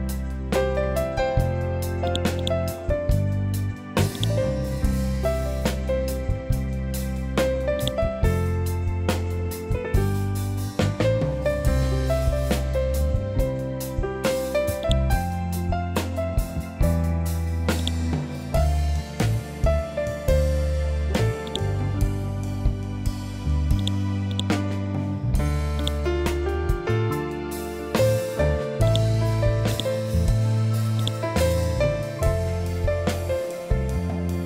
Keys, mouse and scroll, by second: 0.4 Return, 2.0 click, 2.3 right click, 4.1 click, 7.7 click, 12.3 F12, 14.7 click, 15.4-16.2 scroll up 1, 17.7 click, 19.2 F12, 20.3 Escape, 21.4 click, 22.0 ctrl+z, 23.7 click, 26.8 F12, 27.5 Tab, 28.8 click, 32.0 F12.